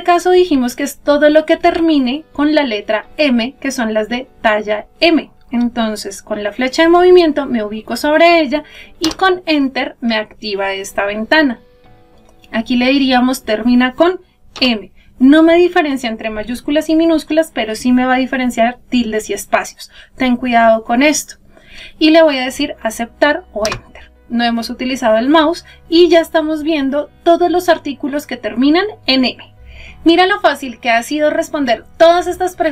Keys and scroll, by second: 8.9 Return, 23.0 Return.